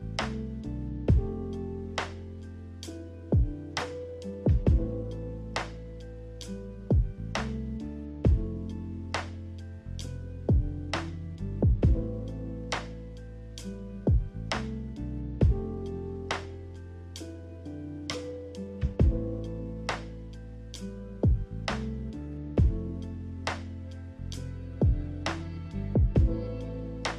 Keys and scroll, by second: 5.6 z, 11.9-13.1 typing, 21.2 Delete, 23.0 b, 25.8 a.